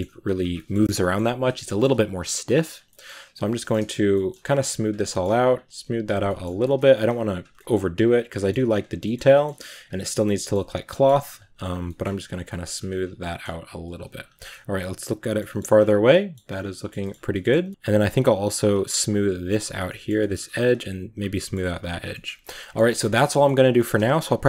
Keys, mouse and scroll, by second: 0.1 click, 0.4 middle click, 0.8 scroll up 1, 0.8-2.0 middle drag, 2.0 scroll up 1, 2.3 click, 2.7 middle click, 3.2 click, 3.3 scroll down 1, 3.4 shift+middle click, 3.6 click, 4.2 middle click, 4.3 click, 4.9 middle click, 5.3 click, 5.6 shift+middle click, 5.6 click, 6.0 scroll down 1, 6.1 middle click, 6.6 scroll up 2, 6.9 click, 7.6 scroll up 1, 7.9 click, 8.2-9.6 middle drag, 9.6 click, 10.2 shift+middle click, 10.5 click, 10.7 scroll down 1, 10.8 shift+middle click, 11.2 click, 12.0 middle click, 12.1 click, 12.3 shift+middle click, 12.7 click, 13.0 scroll down 2, 13.0 middle click, 14.0-14.6 scroll down 6, 14.2 shift+middle click, 14.6 middle click, 15.6 scroll down 1, 15.7 middle click, 16.3 scroll up 6, 16.6 shift+middle click, 17.1 scroll up 1, 17.1 middle click, 17.6-18.5 scroll up 2, 17.7 middle click, 18.5-19.6 drag, 19.6 scroll down 2, 19.7 middle click, 20.2-20.5 scroll up 1, 20.5 click, 21.1 scroll down 2, 21.2 middle click, 21.6 click, 21.8-22.4 scroll down 3, 22.0 middle click, 22.4 middle click, 22.8 scroll up 1, 23.0 scroll down 2, 23.2-24.4 middle drag.